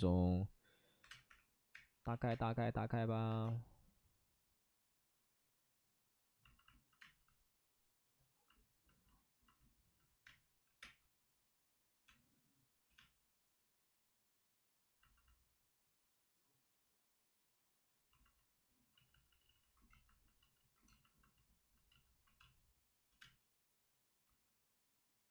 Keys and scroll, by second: 0.8-2.2 typing, 2.0 ctrl+z, 7.0 space, 10.2 space, 10.6 5, 10.7 space, 12.0 space, 12.6 space, 18.9 ctrl+z, 19.0 ctrl+z, 19.2 ctrl+z, 19.4 ctrl+z, 19.5 ctrl+z, 22.3 space, 23.0 space, 24.2 ctrl+z.